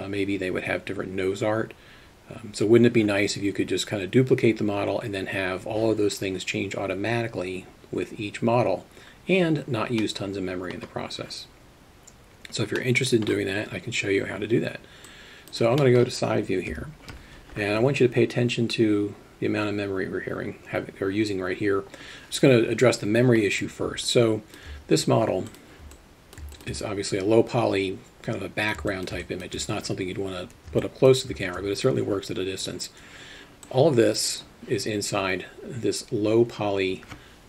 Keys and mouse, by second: 10.1 middle click, 12.8 middle click, 15.1 click, 15.8 middle click, 16.8 KP_3, 24.1 alt+shift+middle click, 26.0-26.4 alt+middle drag, 26.6 alt+shift+middle drag, 26.8-28.7 alt+middle drag, 28.9 alt+shift+middle click, 29.2 alt+middle click, 30.9 shift+middle drag, 33.7-34.3 drag.